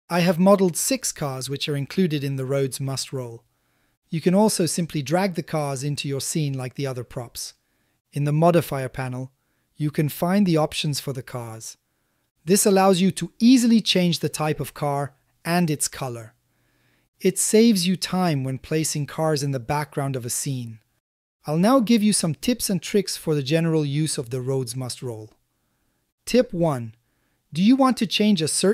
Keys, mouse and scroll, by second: 0.8 click, 2.6 g, 2.9 shift+z, 5.9 a, 6.1 a, 6.7-7.4 drag, 8.1-8.9 drag, 9.5-10.4 drag, 11.3-12.2 drag, 12.7-13.7 drag, 15.0 click, 16.0 click, 16.8 click, 17.7 click, 19.0-19.7 drag, 20.8 middle click.